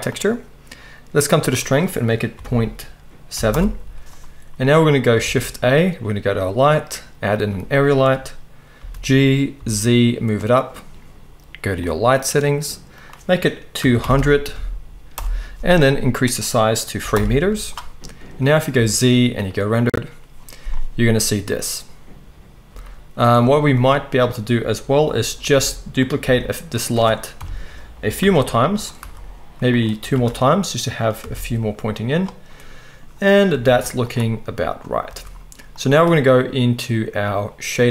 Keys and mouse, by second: 5.2 shift+a, 8.7 g, 10.4-11.8 middle drag, 11.8 click, 11.9-12.9 middle drag, 12.9-26.1 drag, 14.1 0, 18.7 z, 22.7 z, 25.5 r, 26.1-37.9 middle drag, 26.2 g, 27.3 KP_7, 28.2 shift+d, 28.9 r, 30.1 shift+d, 31.2 r, 33.5 r, 35.1 r.